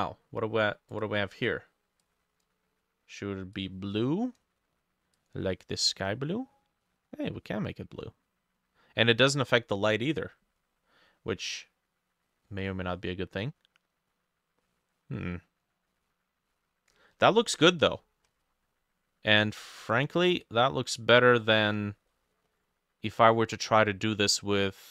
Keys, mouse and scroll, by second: 18.0-18.6 scroll up 11, 21.5-22.1 scroll down 14, 22.1 middle click, 22.5-23.8 scroll up 4.